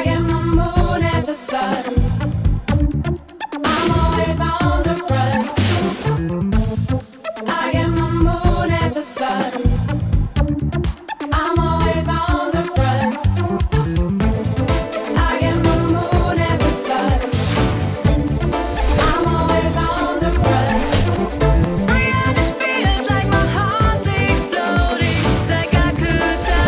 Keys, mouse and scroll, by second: 0.0-1.6 typing, 3.9 Escape, 4.9 click, 6.7-8.0 drag, 10.8 click, 11.3 click, 12.5 click, 13.7-26.6 w, 14.8 Escape, 15.6 click, 23.1 click, 24.1 click, 25.5 click.